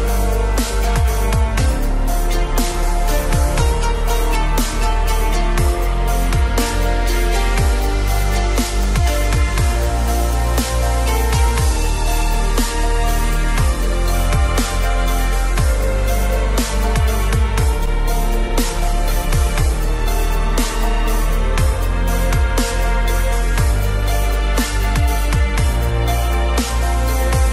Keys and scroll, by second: 16.2 ctrl+0.